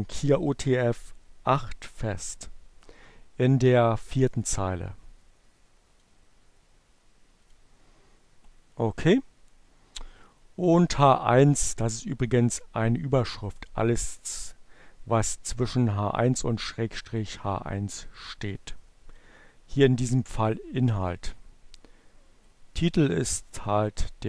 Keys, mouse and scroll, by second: 3.5-5.2 drag, 6.5 click, 9.6-11.3 drag, 16.7-18.6 drag, 21.8 click.